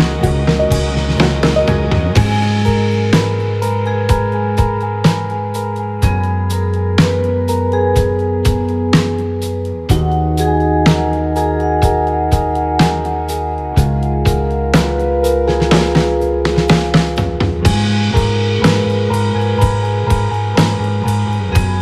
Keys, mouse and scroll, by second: 3.2 b, 6.9 x, 9.8 b, 12.7 x, 13.2 Tab, 13.6 KP_1.